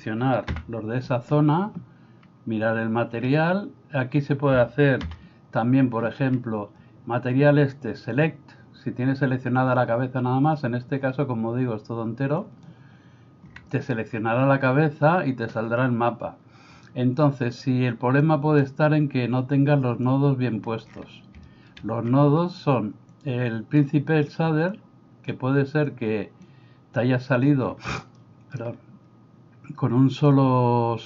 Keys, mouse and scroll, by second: 5.1 a, 12.5 click, 18.2 click, 20.0 click, 21.5 middle click, 23.1 click, 24.7 click, 25.9 click, 27.0 click, 28.2 middle click, 30.1-31.0 drag.